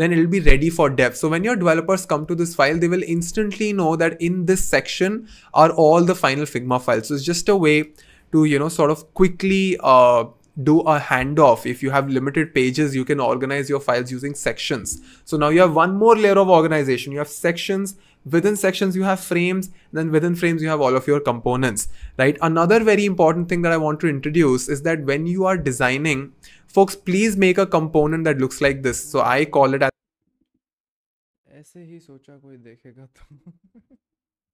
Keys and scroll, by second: 8.7 BackSpace.